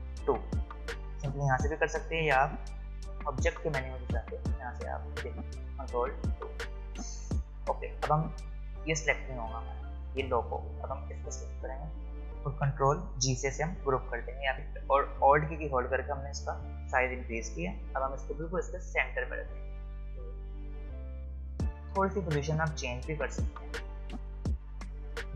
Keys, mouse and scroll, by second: 0.2 ctrl+2, 2.8 click, 9.7 click, 13.7 ctrl+g, 14.5 alt+scroll down 1, 14.7 space, 15.1 click, 15.2 space, 16.9 click, 16.9-25.3 drag.